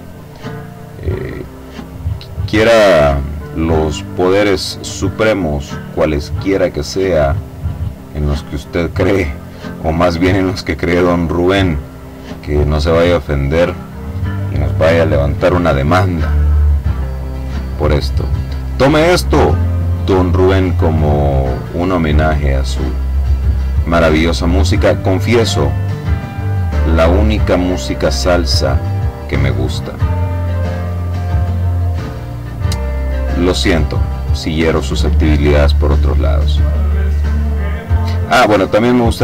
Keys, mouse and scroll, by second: 1.6 click, 3.4 click, 4.2 click, 5.0 click, 6.1 click, 6.9 click, 9.4 click, 10.7 click, 12.1 click, 17.0 click, 18.6 click, 20.1 click, 21.9 click, 22.6 click, 24.4 click, 25.3 click, 26.0 click, 27.2 click, 27.9 click, 30.6 click, 31.5 click, 32.4-33.6 drag, 34.0 click, 35.7 click, 37.7 click, 38.5 click.